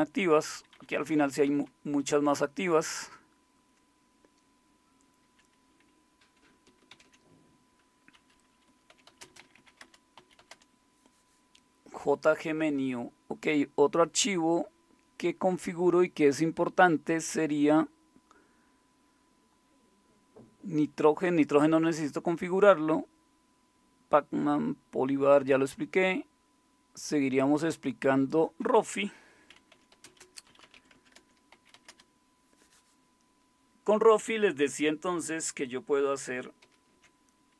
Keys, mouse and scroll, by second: 1.1 Down, 1.3-2.4 Down, 2.7 Down, 2.7 Up, 3.3-5.3 Up, 5.6 Up, 6.5 Down, 6.5 Up, 6.9 ctrl+x, 8.7-10.9 typing, 29.5-32.0 typing, 36.6 alt+super+d.